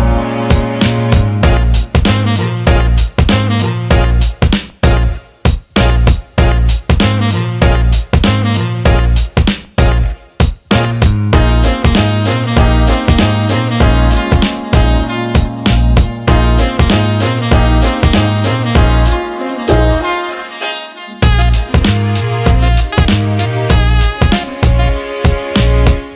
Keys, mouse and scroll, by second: 1.3 click, 3.3 click, 7.5-9.0 shift+drag, 11.5-12.0 alt+middle drag, 11.7 alt+drag, 12.2 alt+shift+middle click, 12.5 alt+middle click, 13.8 alt+shift+middle drag, 14.2 alt+middle click, 14.9 click, 15.1 Tab, 16.1 click, 16.4 alt+middle click, 17.4 shift+click, 17.6 alt+middle click, 18.1 alt+middle click, 19.0 shift+click, 19.5 alt+middle click, 19.8 alt+shift+middle click, 20.2 alt+middle click, 21.0 shift+click, 21.8 shift+click, 22.3 shift+click, 22.6 alt+middle click, 23.3 alt+middle click, 24.0 shift+click, 24.5 alt+middle click, 24.9 ctrl+alt+middle click, 26.0 shift+click.